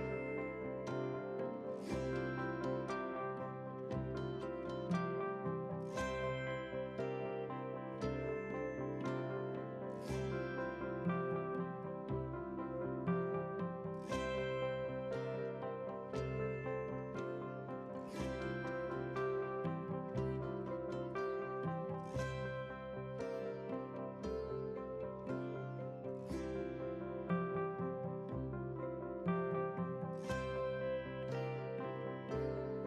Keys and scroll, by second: 1.7 ctrl+z, 6.9 ctrl+g.